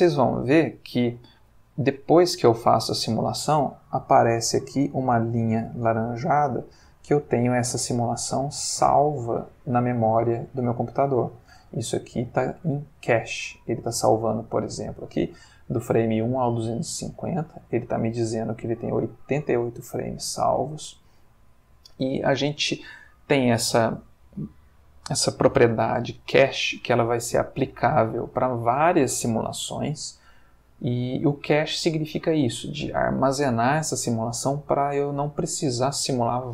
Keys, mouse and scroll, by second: 6.0-11.5 drag, 12.5 click.